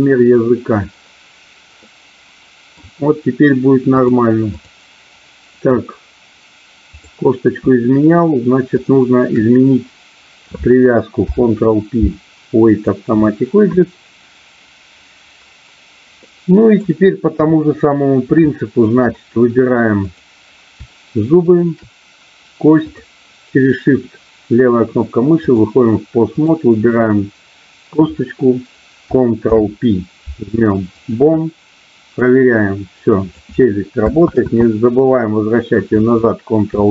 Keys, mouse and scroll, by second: 1.8-2.8 middle drag, 3.9 click, 6.8 click, 11.2 ctrl+p, 16.3 middle click, 17.3 KP_3, 18.4 shift+middle click, 21.4 shift+click, 22.8-25.6 drag, 26.3-27.4 drag, 29.3 ctrl+p, 32.3-33.3 drag, 35.4 ctrl+z, 36.8 shift+middle click.